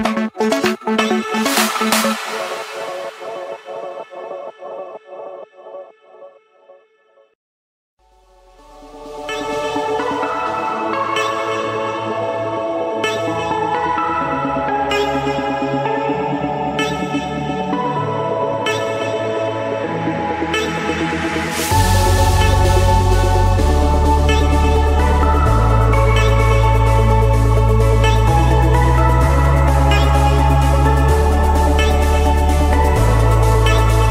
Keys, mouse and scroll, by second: 1.2 click, 5.4-6.9 typing, 5.7 Return, 7.8 Return, 9.1 Return, 12.5 click, 13.4 click, 14.8-15.6 typing, 16.1 Return, 16.7 Escape, 18.1-19.3 drag, 19.5-20.6 drag, 20.7-21.9 drag, 25.7-27.2 typing, 28.4 Return, 31.6 Escape, 32.2 click, 32.8 right click, 33.9 right click.